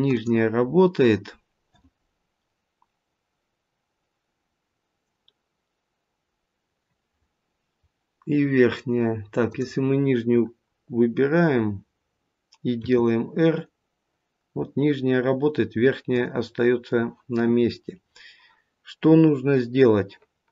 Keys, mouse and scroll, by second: 0.5-3.7 scroll up 1, 4.3-5.1 scroll down 1, 9.3 click, 11.0-11.6 scroll down 2, 11.6-12.4 scroll up 1, 12.6 r.